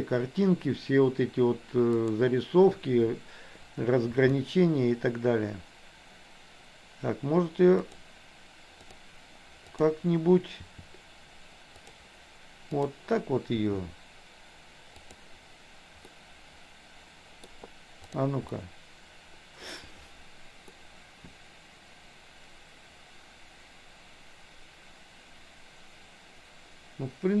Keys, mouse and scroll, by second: 1.9 click, 4.1 r, 8.9 click, 9.7 click, 10.7 r, 12.9 click, 13.6 r, 16.1-17.6 middle drag, 18.5-19.7 middle drag, 20.7-27.4 middle drag.